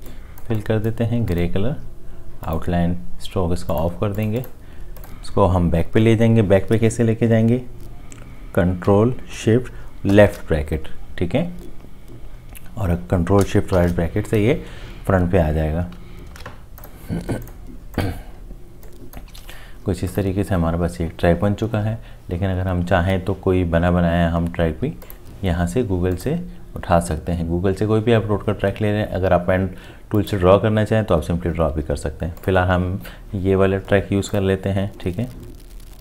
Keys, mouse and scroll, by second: 10.1 ctrl+shift+[, 13.7 ctrl+shift+], 16.3 ctrl+z, 19.4 ctrl+z.